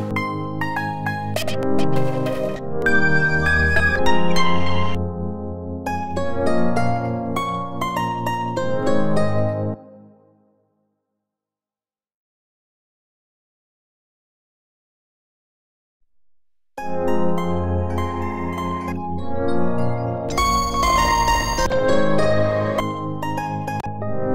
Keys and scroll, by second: 1.2 Return, 2.4 Return, 3.7 Return, 4.8 Return, 17.6 q, 18.8 Return, 20.1 Return, 21.4 Return, 22.6 Return, 23.6 Return.